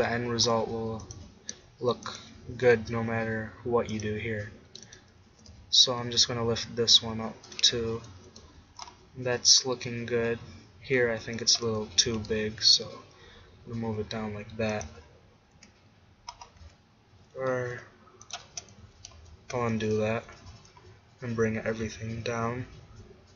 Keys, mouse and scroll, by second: 1.2-3.7 drag, 2.6 g, 4.9-6.9 drag, 5.4 g, 7.7 Tab, 7.7-9.3 drag, 8.5 z, 10.3 Tab, 12.2 g, 14.9-16.4 drag, 14.9 z, 15.7 Tab, 16.7 Tab, 17.8 g, 18.9 ctrl+z, 19.3 ctrl+z, 20.5 g.